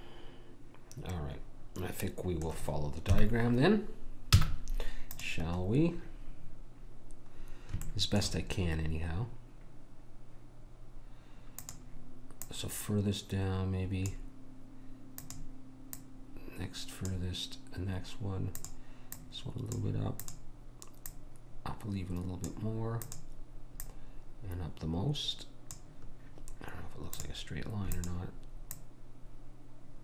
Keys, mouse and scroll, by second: 0.5 middle click, 3.1 KP_1, 4.3 z, 7.9-10.4 middle drag, 11.6 click, 15.2 click, 18.6-23.0 drag, 23.1 click, 27.1-30.0 drag.